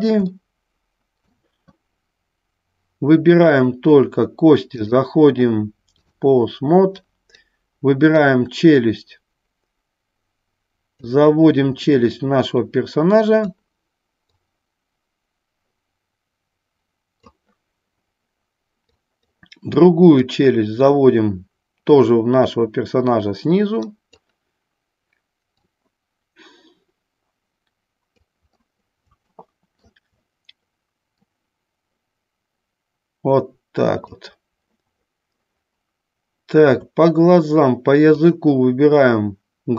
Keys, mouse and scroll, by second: 0.5-1.6 middle drag, 3.6 click, 5.1-6.2 drag, 7.3 click, 8.4-11.1 drag, 12.0-13.8 drag, 14.6-17.5 drag, 19.0 click, 20.2-24.2 drag, 25.9-28.4 drag, 29.5 shift+middle click, 31.4-34.3 drag, 38.2-39.7 drag.